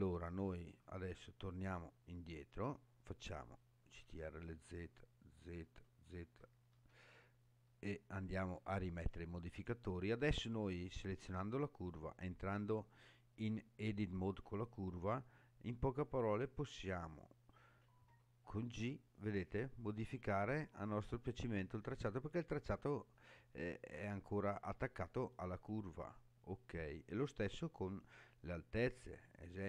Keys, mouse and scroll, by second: 0.8 Tab, 2.2 click, 3.8 ctrl+z, 4.7 ctrl+z, 5.6 ctrl+z, 6.2 ctrl+z, 6.7 ctrl+z, 7.7 ctrl+z, 8.4 ctrl+z, 11.2 click, 12.5 Tab, 16.4 click, 18.1 g, 25.8 right click, 27.2-29.2 middle drag.